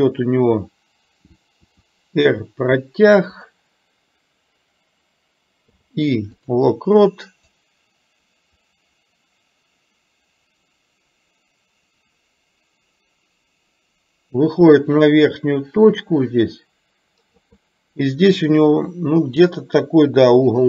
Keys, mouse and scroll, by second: 1.7 r, 5.7 i, 7.7-17.5 drag.